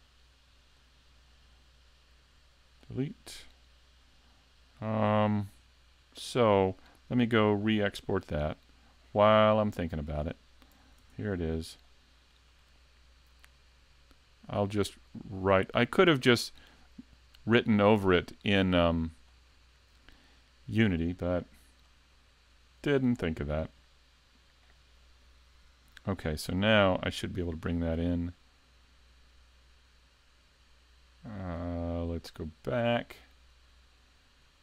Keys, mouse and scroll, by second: 9.7 right click, 10.2-10.9 scroll up 4, 11.0 s, 11.9 shift+middle click, 13.4 click, 22.2 click.